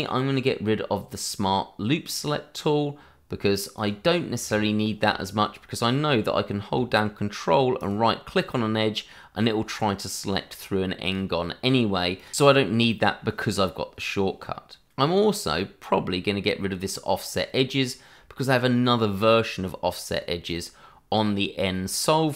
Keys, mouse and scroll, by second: 2.0 click, 7.8 right click, 11.0 click.